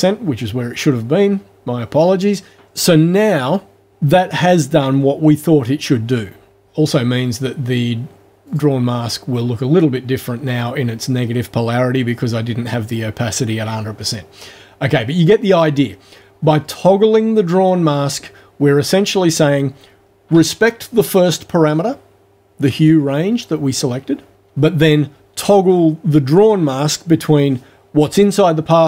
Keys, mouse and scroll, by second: 8.5 click.